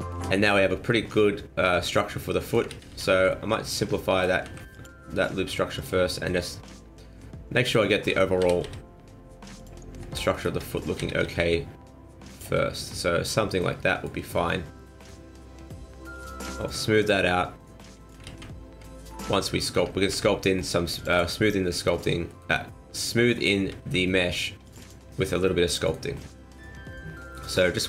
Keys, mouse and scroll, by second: 0.2 middle click, 2.7 ctrl+z, 2.9 ctrl+z, 3.3 middle click, 4.4 ctrl+r, 6.1 middle click, 6.4 middle click, 8.0 middle click, 8.4 s, 10.3 alt+right click, 10.9 s, 12.5 middle click, 14.3 middle click, 16.1 click, 17.0 click, 18.3 ctrl+z, 18.9 middle click, 20.1 ctrl+r, 21.4 middle click, 22.3 middle click, 23.8 ctrl+r, 25.1 middle click, 25.3 m, 26.1 middle click.